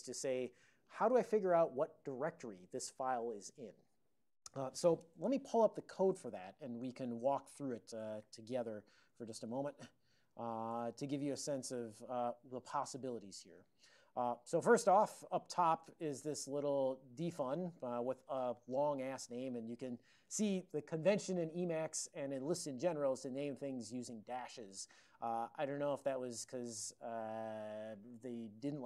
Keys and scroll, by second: 5.9 ctrl+x, 8.2-11.5 typing, 9.3 ctrl+/, 9.7 ctrl+x, 10.8 Return, 11.3 ctrl+x, 12.2 ctrl+n, 12.7 ctrl+n, 13.0 ctrl+n, 13.9 ctrl+n, 15.1 ctrl+l, 17.3 alt+f, 18.2 alt+f, 18.8 alt+f, 19.3 alt+f, 19.6 alt+b, 19.8 alt+b, 23.2 ctrl+b, 23.6 ctrl+f.